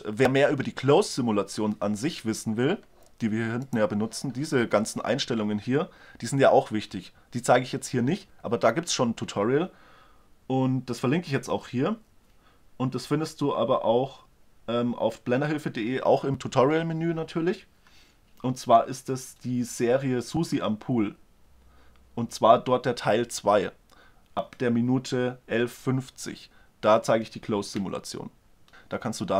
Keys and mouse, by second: 3.7-5.7 drag.